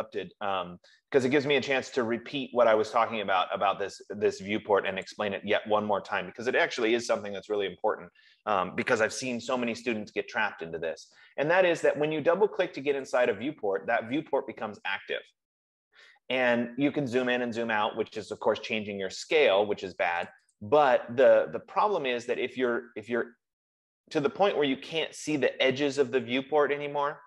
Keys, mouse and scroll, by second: 5.4 click, 7.3 click, 13.5 click, 13.7 click, 20.5 click, 20.9 click, 23.0 scroll, 23.8-24.7 scroll.